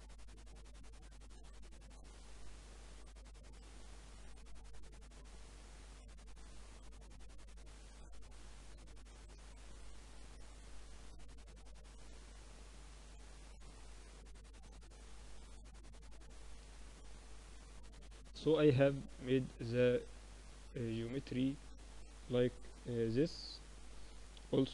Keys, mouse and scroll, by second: 0.9 z, 1.2 z, 1.4-9.7 middle drag, 9.7 click, 10.3 right click, 11.2 z, 11.3-14.5 middle drag, 12.2 z, 14.5 click, 15.4-16.9 middle drag, 16.9 ctrl+alt+shift+c, 18.7-20.5 drag, 21.7-22.9 middle drag, 22.9 KP_1.